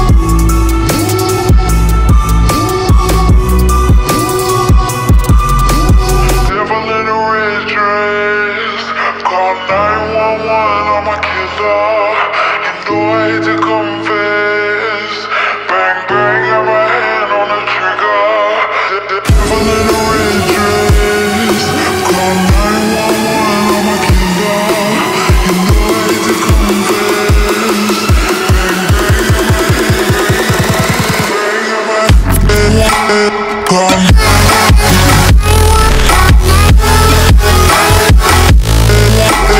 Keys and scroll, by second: 9.3-10.5 typing, 24.4-25.4 typing.